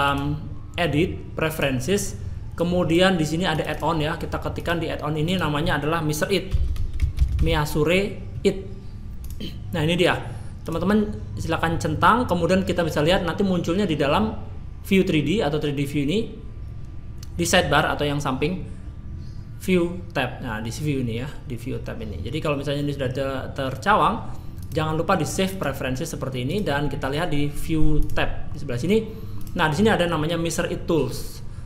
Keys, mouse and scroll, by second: 0.0 click, 28.0 click, 29.4 click.